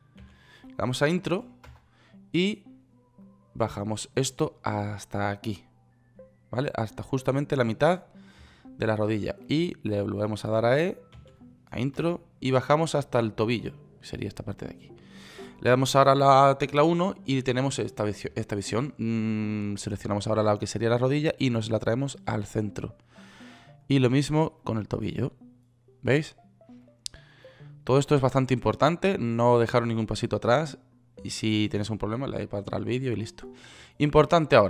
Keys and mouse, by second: 0.6 e, 11.5 e, 17.1 KP_1, 21.3-23.4 right drag, 25.0-26.5 right drag, 27.8 right click, 29.2 click.